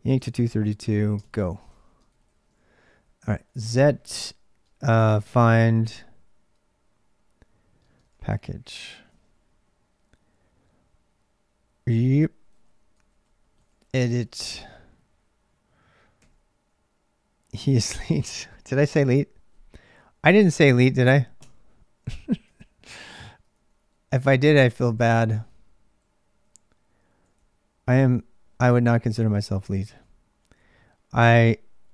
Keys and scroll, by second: 0.0-31.9 typing, 1.5 ctrl+[, 12.4 ctrl+[.